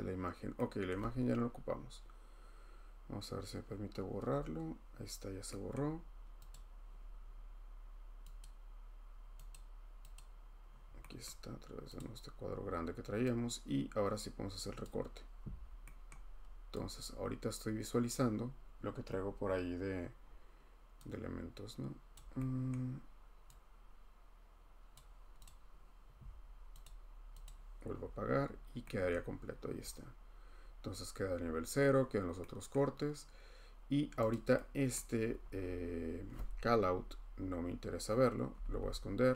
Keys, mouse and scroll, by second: 0.3 scroll, 0.9 scroll, 4.4 Delete, 5.7 click, 6.0-6.5 scroll, 6.5 click, 8.4 click, 9.5 click, 10.1 click, 10.8-11.3 scroll, 12.0 click, 12.3-12.9 scroll, 14.8 click, 15.5-16.1 scroll, 16.1-17.0 scroll, 18.1 click, 20.2 middle click, 22.1 click, 22.3-22.7 scroll, 24.9 click, 25.4 click, 26.8 click, 27.4 click, 27.9 middle click, 28.1 middle click, 28.3 middle click, 29.1 middle click, 29.3 middle click, 29.4-30.0 scroll, 30.6-30.9 scroll, 31.3 scroll, 32.7-33.4 scroll, 34.3 click, 34.9 click, 35.3-36.5 scroll, 36.5 scroll, 38.6 typing.